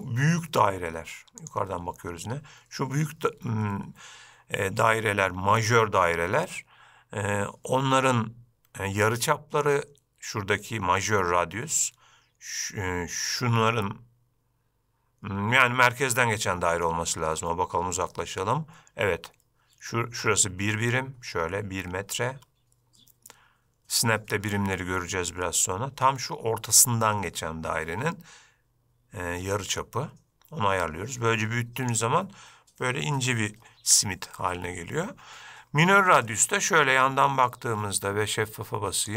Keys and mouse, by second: 5.1-5.8 shift+middle drag, 29.7-32.1 drag, 36.4-37.6 middle drag.